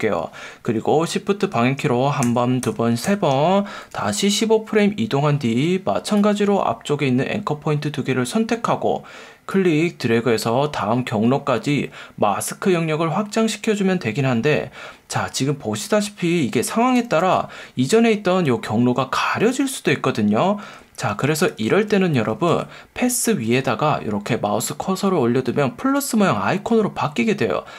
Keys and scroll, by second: 2.2 shift+Right, 3.9 F1, 5.5 F1.